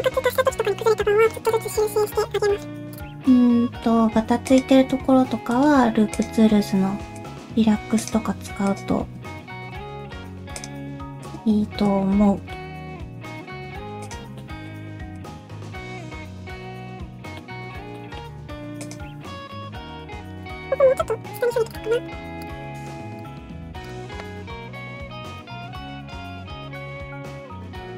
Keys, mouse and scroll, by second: 0.5 middle click, 0.8 scroll down 1, 1.0 middle click, 1.4 click, 1.6 middle click, 2.0 shift+click, 2.2 middle click, 2.9 click, 3.2 middle click, 3.9 scroll down 1, 4.5 ctrl+click, 5.5 right click, 8.0 click, 8.7 ctrl+click, 9.4 shift+y, 9.8 middle click, 10.6 click, 11.2 ctrl+click, 12.1 shift+y, 12.5 middle click, 13.3 shift+middle click, 14.0 click, 14.4 middle click, 15.1 ctrl+click, 16.0 shift+u, 17.9 middle click, 17.9 shift+middle click, 18.2-18.8 scroll up 2, 18.8 click, 19.3 alt+z, 19.5 middle click, 20.0 scroll up 1, 20.4 click, 20.5 middle click, 20.8 g, 21.7 click, 21.8 middle click, 22.0 g, 22.6 middle click, 23.0 ctrl+z, 23.2 click, 23.4 g, 24.4 click, 24.5 g, 25.1 middle click, 25.4 alt+z, 25.5 scroll down 1, 25.7 middle click, 26.2 middle click, 27.3 shift+middle click, 27.6 click, 27.8 middle click.